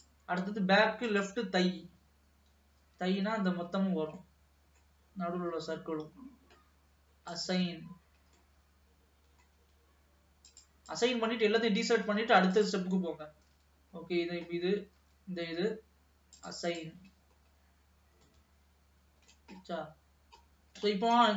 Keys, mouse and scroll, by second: 0.6-1.2 scroll down 2, 1.2 click, 3.0 l, 3.5 l, 4.5-5.7 middle drag, 5.7 l, 6.3-7.4 scroll down 1, 7.4-8.6 drag, 8.6-10.6 middle drag, 10.6 click, 12.7 click, 13.6 l, 14.1-15.2 scroll down 2, 15.2 l, 16.5-17.5 drag, 17.5-18.5 scroll down 2, 18.5-19.9 middle drag, 19.9-20.6 scroll up 2, 20.6-21.2 scroll down 3, 21.2 middle click.